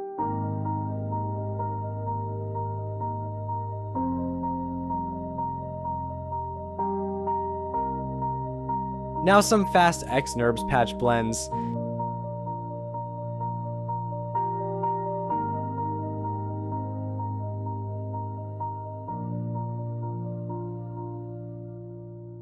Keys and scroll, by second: 1.9 j, 4.3 shift+i, 4.7 Return, 5.7 Delete, 8.9 shift+x, 10.8 Delete, 15.6 shift+w, 16.2 Tab, 20.2 Return, 21.8 j.